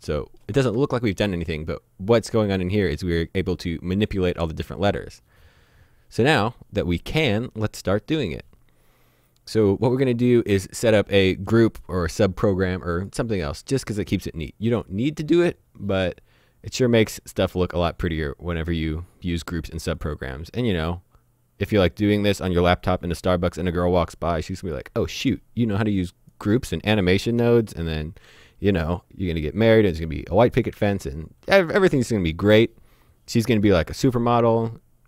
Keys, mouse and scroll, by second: 6.6 click, 14.0-15.4 scroll down 1, 20.0 click, 23.8 click, 30.8 shift+a.